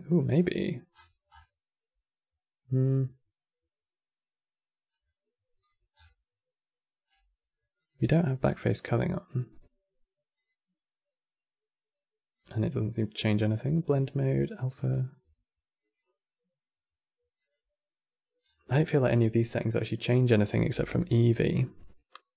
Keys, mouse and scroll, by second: 0.0 click, 0.6-1.3 scroll down 17, 4.6-5.1 scroll down 4, 5.3-5.6 drag, 5.6-6.0 scroll down 8, 6.8-7.5 scroll down 3, 7.5 click, 8.2 click, 10.1 click, 12.1 click, 13.1-18.1 drag, 18.1-18.4 scroll down 4.